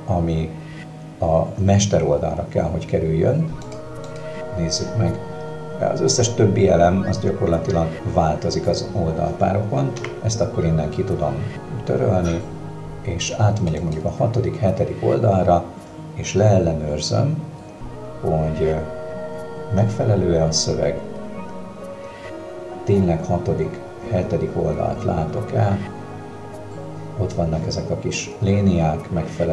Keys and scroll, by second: 10.0 Delete.